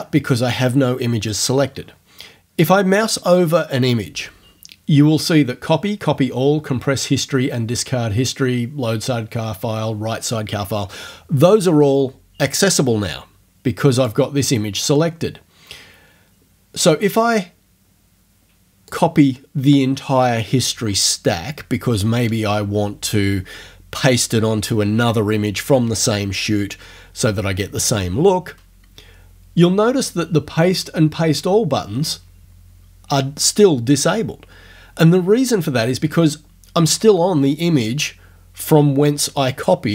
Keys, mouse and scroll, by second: 14.0 click, 18.9 click.